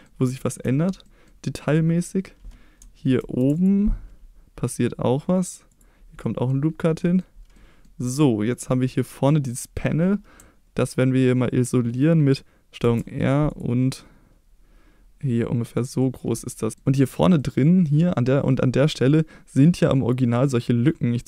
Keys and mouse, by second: 0.3 shift+middle click, 1.0 middle click, 3.2 ctrl+r, 5.7 click, 6.2 middle click, 7.0 middle click, 7.5 middle click, 12.8 ctrl+r, 15.7 click, 16.0 middle click, 16.7 middle click.